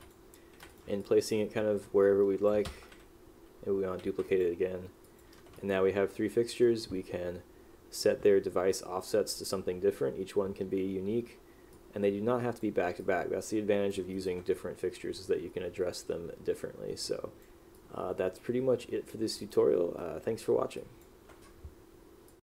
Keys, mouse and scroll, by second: 0.1 click, 0.8 click, 1.9 click, 4.4 click, 5.2 click, 5.7 click, 11.9 click, 13.1 click, 17.2 click, 17.9 click, 19.6 right click, 20.9 click.